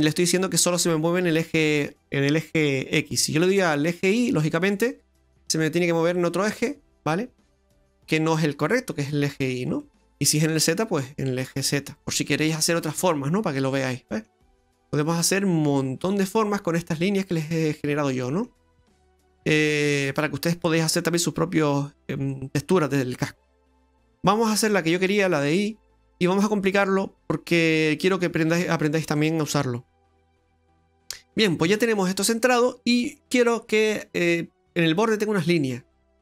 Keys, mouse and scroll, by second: 0.0 middle click, 3.6 click, 6.3 middle click, 9.8 middle click, 11.1 click, 13.5 middle click, 13.6 middle click, 14.4 middle click, 14.5-14.9 scroll down 3, 14.9 middle click, 19.6 middle click, 25.0 click, 28.9-30.3 scroll down 2, 29.2 middle click, 31.9 middle click, 32.7 middle click, 33.4-34.1 scroll down 1, 34.1-35.1 scroll down 4.